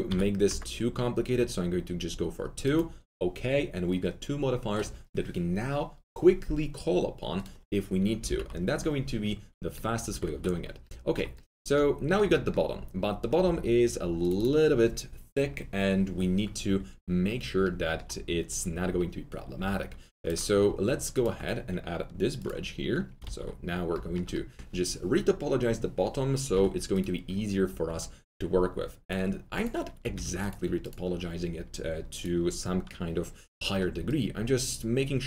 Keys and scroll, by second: 0.0 2, 0.4 Return, 8.2 ctrl+z, 13.4 2, 18.8-19.5 typing, 23.2 alt+q, 26.5 3, 30.0 4.